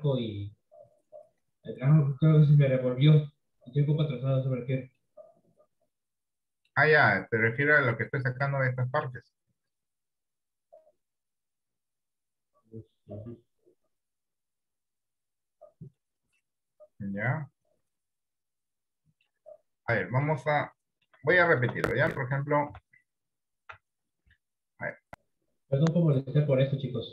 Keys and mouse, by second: 5.1-7.3 middle drag, 16.5-19.8 middle drag, 20.1 middle click, 20.8 middle click, 21.4 shift+middle click, 21.9 middle click, 22.8 Tab, 23.9 Tab.